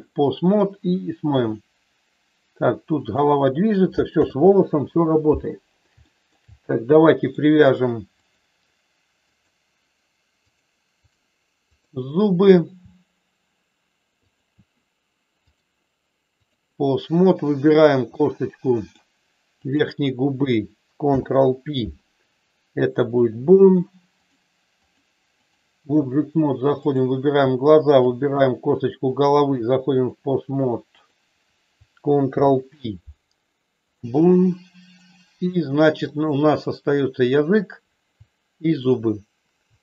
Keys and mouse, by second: 1.3 r, 4.3 ctrl+z, 6.0 shift+middle click, 7.0 middle click, 8.0 click, 9.1 click, 10.4 click, 11.6 click, 15.5-16.6 drag, 18.1 middle click, 19.6 click, 24.1 click, 24.8 click, 26.9 click, 27.9 shift+click, 29.0-30.1 drag, 30.9 click, 32.3 ctrl+p, 35.0 click, 36.1 middle click, 37.3 click, 38.6 shift+click.